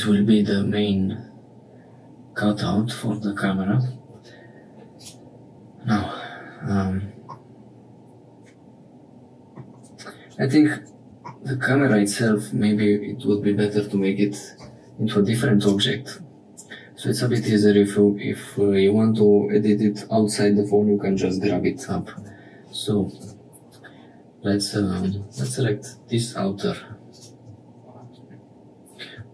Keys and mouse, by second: 4.9 click, 7.3-9.6 middle drag, 11.7 middle click, 15.5 click, 17.3 click, 22.1 Tab, 23.2 2, 25.3 click.